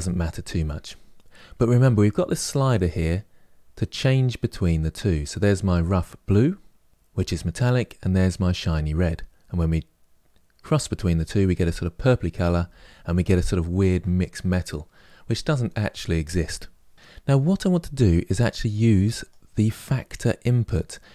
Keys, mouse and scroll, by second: 1.9-4.7 drag.